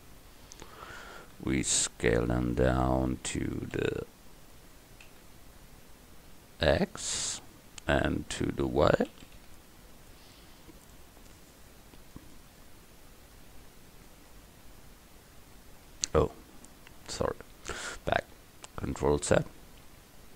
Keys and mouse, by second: 1.4 s, 3.8 s, 9.1 s, 13.1 middle click, 13.8 middle click, 19.4 ctrl+z, 19.9 ctrl+z.